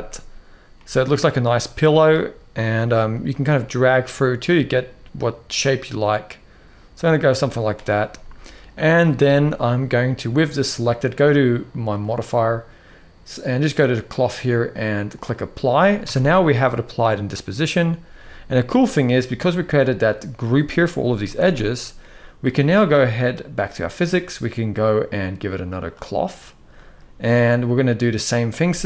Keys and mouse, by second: 0.5-1.8 middle drag, 3.0-7.4 drag, 7.8-8.3 middle drag, 8.8 click, 11.6 click, 13.8-15.0 drag, 15.4 middle click, 15.8 Tab, 16.1-17.4 middle drag, 21.1 Tab, 21.7-22.1 middle drag, 28.7 shift+Left.